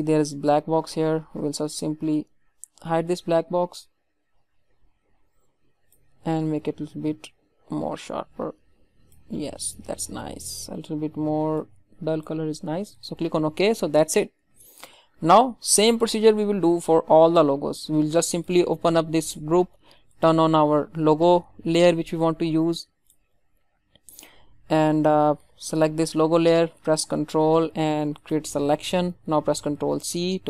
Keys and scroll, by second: 23.3 ctrl+z, 29.7 ctrl+c.